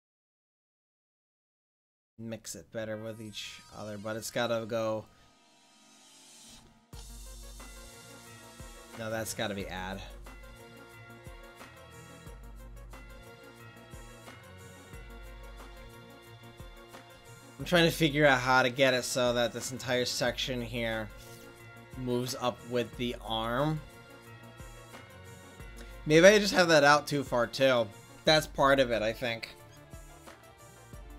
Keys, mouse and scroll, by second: 6.7-13.2 drag.